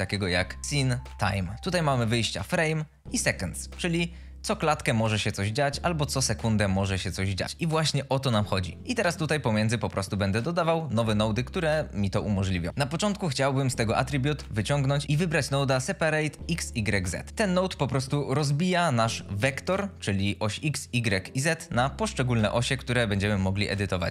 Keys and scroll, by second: 0.0 n, 0.4 e, 5.8 Escape, 7.0 Escape, 15.0 p, 15.0 a, 16.7 Return, 23.2 Escape.